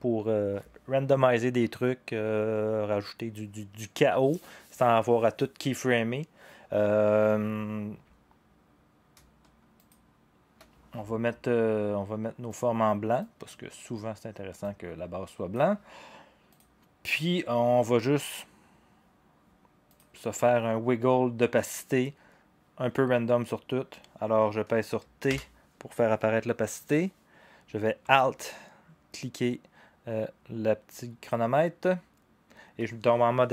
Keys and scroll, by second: 25.3 t.